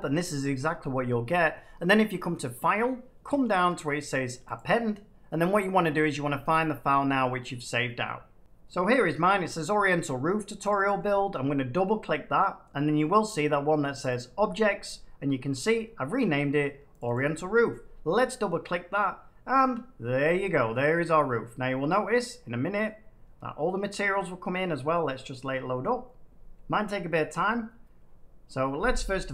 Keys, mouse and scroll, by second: 2.4 click, 4.5 click, 10.6-11.7 drag, 13.9-15.0 drag, 16.9-18.0 drag, 22.8 middle click.